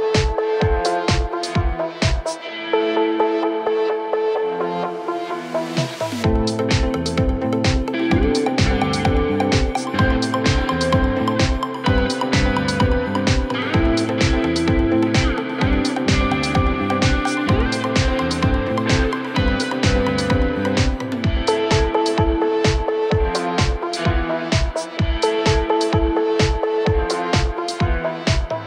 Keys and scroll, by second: 0.0-0.1 typing, 5.8 Return, 7.3-8.0 typing, 8.8 Return, 11.6 typing, 19.6 typing, 26.5-28.6 typing.